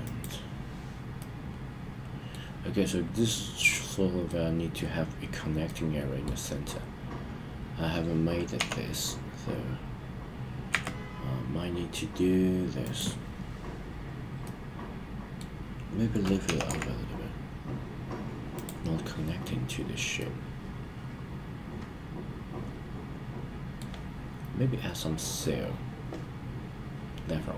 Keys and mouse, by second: 0.0 click, 1.2-2.4 middle drag, 4.3-4.7 middle drag, 5.6-6.2 middle drag, 8.5 g, 10.6 x, 12.8 click, 14.4-15.4 middle drag, 16.4 g, 16.6 z, 18.5 click, 20.1-23.8 middle drag.